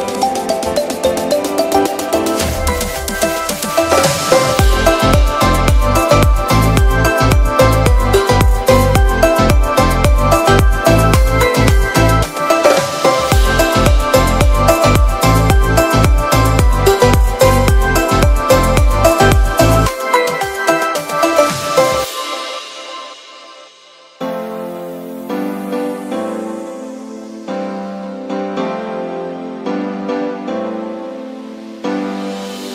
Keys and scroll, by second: 10.1 Return, 11.6 Left, 17.6 b, 22.9 b, 27.2 [, 29.8 ], 32.4 [.